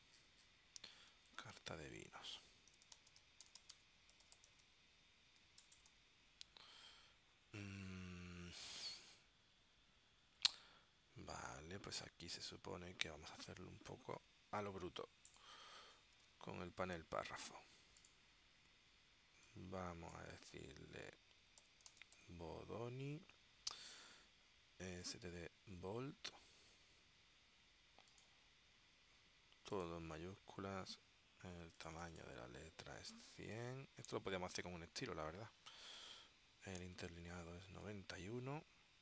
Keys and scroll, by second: 1.4 super+Tab, 2.6-6.0 typing, 21.4-22.8 typing, 33.2-34.2 typing, 36.6-37.5 typing, 38.0 Tab.